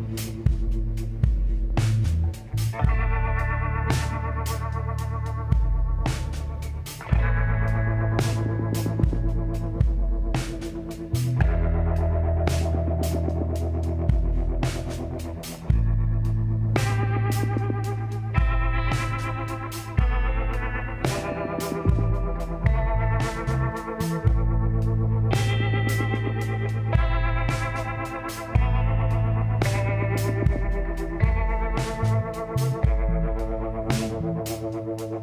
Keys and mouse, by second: 5.2 f, 5.7-8.5 drag, 7.2 e, 8.5 KP_1, 9.6 z, 11.6 l, 12.9-14.7 drag, 14.7 middle click, 16.1 z, 18.3 middle click, 20.1-21.9 drag, 21.3 w, 24.5 w, 27.9 ctrl+z, 29.8 ctrl+e, 31.8 shift+s.